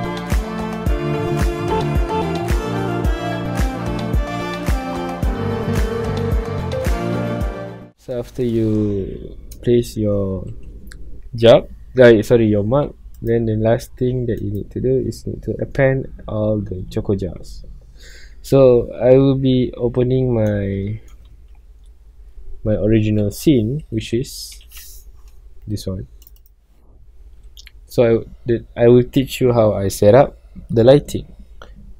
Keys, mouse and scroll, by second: 0.0-2.3 typing, 0.0 click, 0.8 scroll up 1, 1.2 click, 1.5 middle click, 1.9 ctrl+click, 2.9 click, 3.2 alt+d, 4.2 alt+a, 4.3-4.7 middle drag, 4.7-5.1 scroll up 2, 5.1 click, 5.4-7.6 typing, 6.0 click, 6.9 click, 7.0 shift+middle drag, 7.2 click, 7.6-9.0 middle drag, 9.0 scroll down 1, 9.4-10.8 shift+middle drag, 10.8 ctrl+s, 11.1 scroll up 1, 14.6-17.1 drag, 17.1 Escape, 18.6 scroll down 1, 19.3-19.9 middle drag, 19.9 scroll up 1, 20.1-24.6 middle drag, 24.6 ctrl+o.